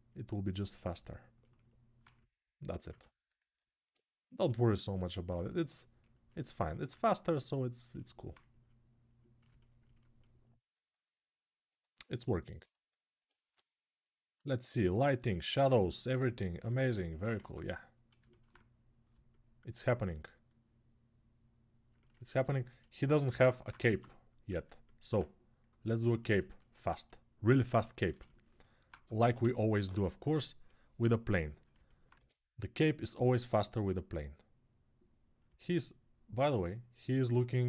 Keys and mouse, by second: 17.5 right click, 18.4-25.4 middle drag, 23.6 ctrl+Tab, 25.4 click, 25.6-34.9 ctrl+middle drag, 27.5 ctrl+s, 28.8 ctrl+Tab, 29.3 shift+a, 31.9 Tab, 33.3-34.9 drag.